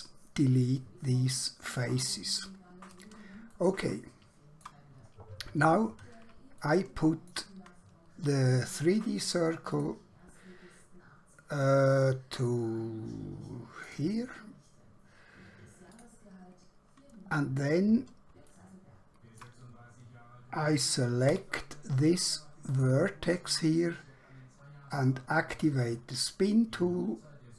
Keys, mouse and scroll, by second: 1.7 click, 3.7 shift+middle click, 5.3 scroll up 1, 5.7 scroll down 1, 6.7 shift+middle click, 9.8 click, 13.8 click, 17.5 scroll up 1, 18.5 shift+middle click, 21.4 1, 22.7 click, 25.5 click.